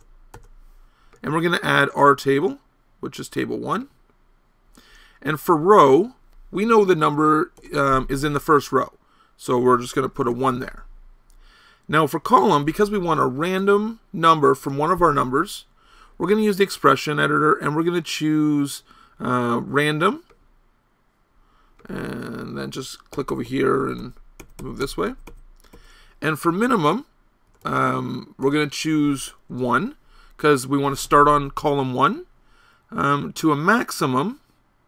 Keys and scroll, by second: 0.0-0.4 typing, 7.0 BackSpace, 7.1 BackSpace, 7.6 BackSpace, 13.3 BackSpace, 13.6 BackSpace, 14.6 BackSpace, 23.2 Right, 23.3 Right, 23.5 Right, 23.7 Right, 23.8 Right, 24.0 Right, 24.4 Right, 24.9 Right, 25.1 Right, 25.3 Right, 25.7 Right, 27.5 BackSpace, 27.7 BackSpace, 28.5 BackSpace.